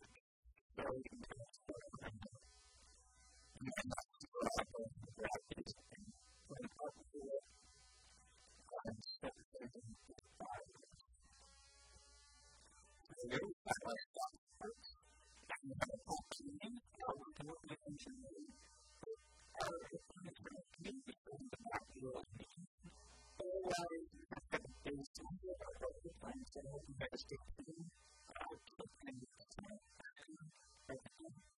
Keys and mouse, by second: 3.1 KP_1, 3.3 click, 4.1 a, 4.7 b, 5.5 g, 7.0 click, 7.2 g, 7.6 a, 9.2 b, 10.0 b, 10.8 g, 11.6-12.9 drag, 11.8 a, 12.0 Tab, 12.9 middle click, 15.0 middle click, 15.4 middle click, 20.5-26.2 middle drag, 27.8-29.0 middle drag.